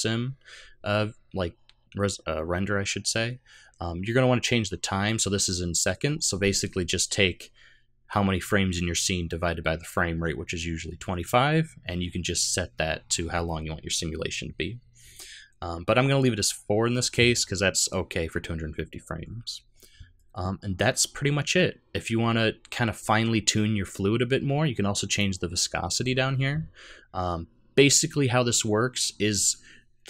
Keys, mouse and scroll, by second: 15.2-16.1 scroll down 3, 19.2 scroll down 4, 20.2-21.4 scroll down 2, 25.1 click, 25.6-26.8 scroll down 11.